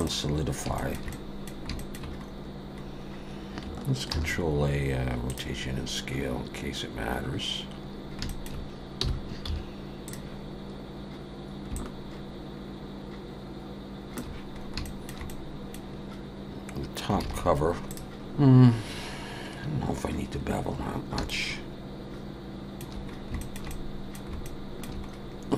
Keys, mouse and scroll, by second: 0.8 shift+middle click, 1.1 middle click, 1.8 shift+middle click, 2.2-2.8 scroll up 3, 2.8-3.6 scroll down 1, 4.1 ctrl+a, 8.0 scroll down 1, 8.3 shift+middle click, 9.0 g, 11.7 shift+click, 14.6 scroll up 2, 14.8 shift+middle click, 15.3 middle click, 16.7-17.1 scroll down 1, 17.2 alt+a, 18.1 shift+middle click, 18.1 scroll down 2, 19.3 scroll up 1, 19.9 scroll down 3, 20.7-21.2 scroll down 2, 21.3 shift+middle click, 23.1 scroll up 2, 23.4 shift+middle click, 23.7 middle click, 24.4 shift+middle click, 25.1-25.5 scroll up 2.